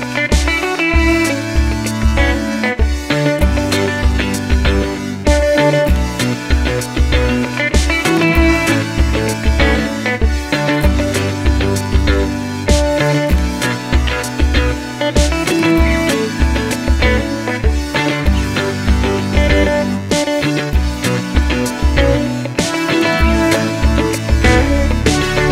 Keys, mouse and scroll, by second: 2.9 ctrl+click, 4.9 ctrl+click, 6.3 ctrl+click, 11.7 ctrl+alt+click, 13.7-14.9 scroll up 1, 14.9 click, 25.0 ctrl+click.